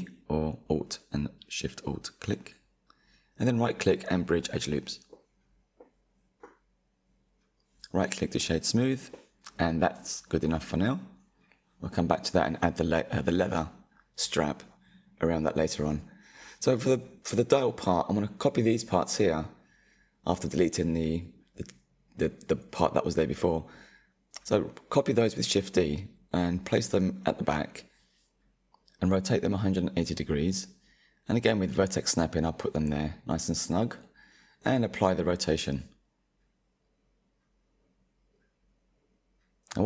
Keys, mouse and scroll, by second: 0.0-1.1 middle drag, 1.1 alt+shift+click, 2.2-6.2 right drag, 6.2 Tab, 6.8-9.6 right drag, 9.6 click, 10.1-10.4 middle drag, 10.4 Tab, 12.2 Delete, 13.4 click, 14.9 shift+click, 17.2 shift+d, 19.4 click, 21.4-22.9 drag, 26.3-26.9 drag, 26.9-27.2 scroll up 5, 27.7-28.0 drag, 28.0-28.6 shift+middle drag, 28.6-29.7 scroll up 1, 29.7 click, 31.3 scroll down 4, 34.1 ctrl+a, 36.1 click, 36.9 click, 38.2 click, 38.9-39.8 middle drag, 39.0 scroll.